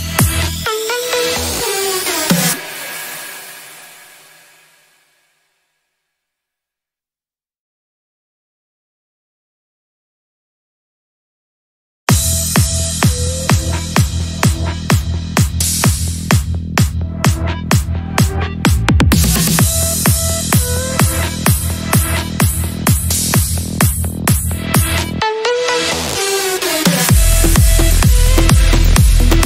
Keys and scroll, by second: 4.8 F3, 5.9 ctrl+g, 6.3 c, 7.5 shift+F2, 7.6 F3, 7.7 Escape, 20.0 Caps_Lock, 21.8 h.